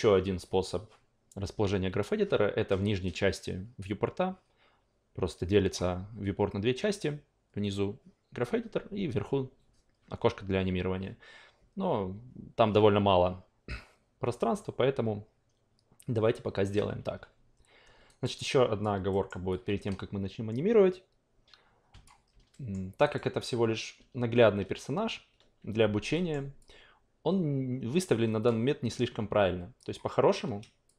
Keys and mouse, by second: 18.1 alt+right click, 18.4 alt+click, 19.1 alt+middle click, 19.5 alt+click, 22.7 alt+middle click, 23.0 alt+right click, 26.1 alt+middle click, 26.6-28.4 alt+drag, 29.8 drag, 30.8 shift+click.